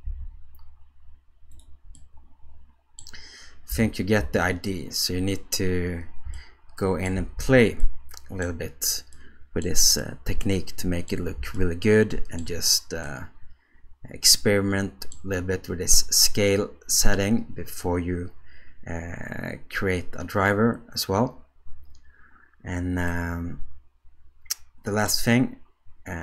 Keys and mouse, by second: 2.0-3.0 middle drag, 3.7 g, 6.3-7.1 shift+middle drag, 7.4 alt+a, 7.8 middle click, 9.2 middle click, 10.0-11.1 ctrl+middle drag, 11.5-12.4 shift+middle drag, 13.1-15.2 middle drag, 23.1-25.1 middle drag.